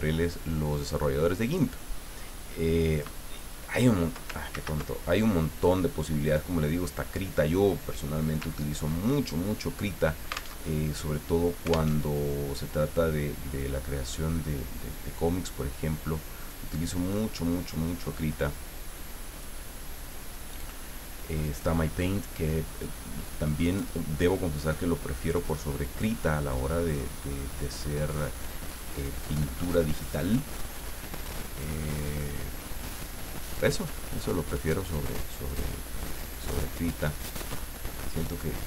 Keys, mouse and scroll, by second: 1.5 click, 2.9 click, 4.5 ctrl+z, 5.6 click, 6.2 click, 8.4 ctrl+scroll up 2, 10.6 alt+Tab, 11.9 alt+Tab, 14.1-16.9 drag, 18.1-19.8 drag, 20.3-21.6 drag, 22.8-26.2 drag, 26.9-30.3 drag, 32.1 click, 34.7 click, 36.2-38.6 drag.